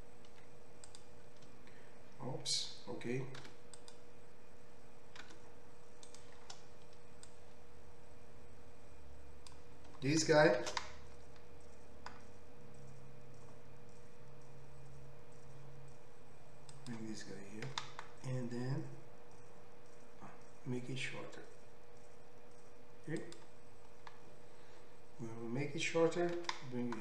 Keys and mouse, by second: 3.9 3, 5.3 g, 7.4-16.9 drag, 11.1 shift+d, 16.9-27.0 middle drag, 17.7 s, 26.4 g.